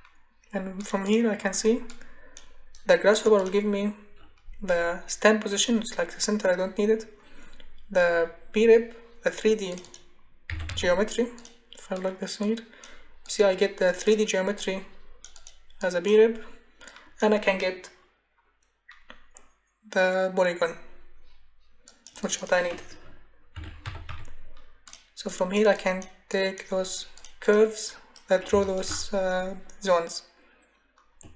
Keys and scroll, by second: 10.2-11.2 typing, 23.3-24.6 typing.